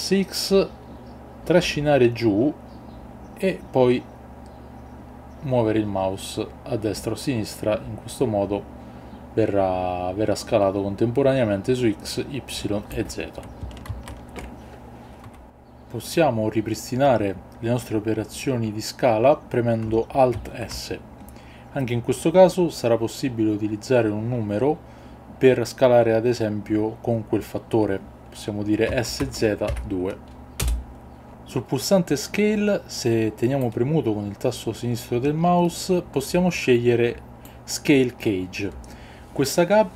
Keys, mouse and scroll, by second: 13.9 ctrl+z, 16.1 click, 16.1 x, 20.3 alt+s, 29.2 z, 29.7 KP_2, 30.6 Return, 33.7-37.5 drag.